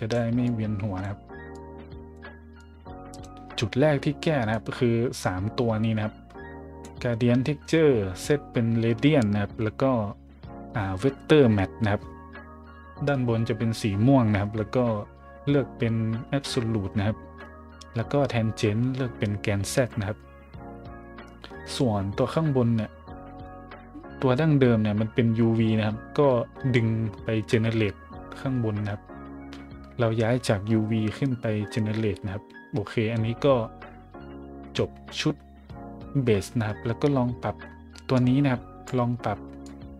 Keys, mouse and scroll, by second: 0.4 click, 1.5 click, 2.5 click, 4.5-6.8 drag, 38.1 click, 39.6-39.9 drag.